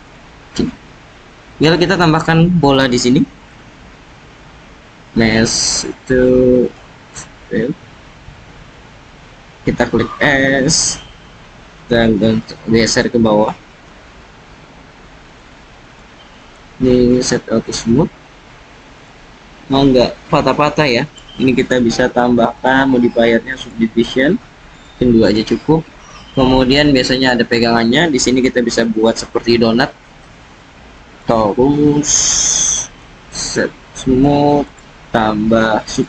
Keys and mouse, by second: 1.2-1.8 drag, 3.7 shift+a, 9.4 s, 10.7 click, 12.4 g, 13.8 z, 15.2 click, 16.4 click, 18.9 click, 22.6-23.7 drag, 26.3 click, 29.3 shift+a, 32.8 click, 34.6-36.0 drag.